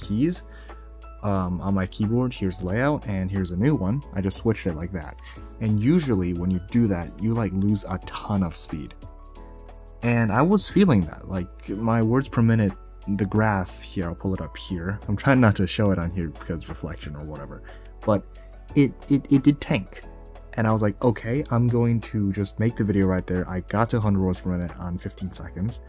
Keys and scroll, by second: 2.5 ,.